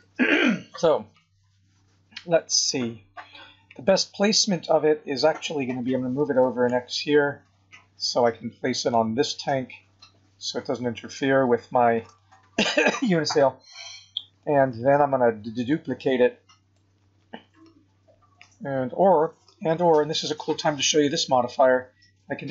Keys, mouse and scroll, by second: 1.8-2.6 scroll down 9, 2.8 scroll up 2, 5.9 g, 9.2 middle click, 11.0 scroll up 3, 12.1 shift+middle click, 13.2 scroll up 2, 13.7 scroll down 4, 14.4 middle click, 22.4 click.